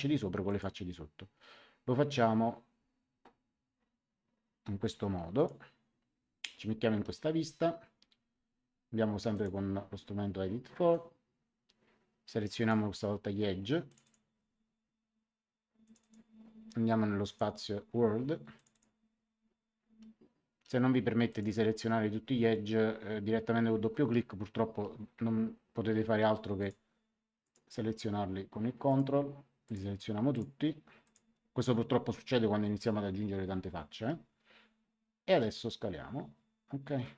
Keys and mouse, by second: 0.4 click, 5.3 click, 9.3 click, 12.5 click, 13.8 click, 15.8 click, 17.2 click, 18.5 click, 21.2 click, 26.5 ctrl+click, 28.8 ctrl+click, 35.3 click.